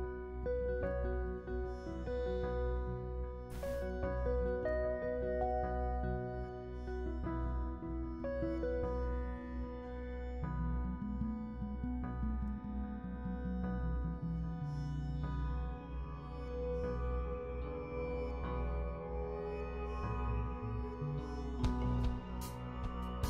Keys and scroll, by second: 17.7 s.